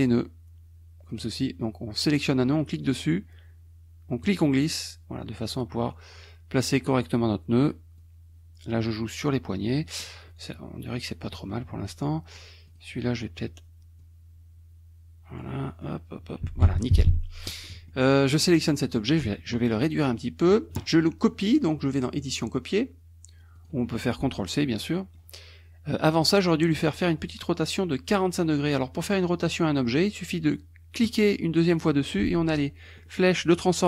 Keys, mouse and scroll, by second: 2.8 click, 4.2-7.0 drag, 8.0-9.2 drag, 9.7 middle click, 10.3 middle click, 11.2 middle click, 12.7 click, 14.0-16.0 drag, 15.6 middle click, 16.7 F1, 17.0 KP_Subtract, 17.6 click, 18.4 click, 18.7 middle click, 18.8 click, 19.7 ctrl+click, 22.2 click, 23.7 click, 24.9 middle click, 31.0 click, 32.9 middle click.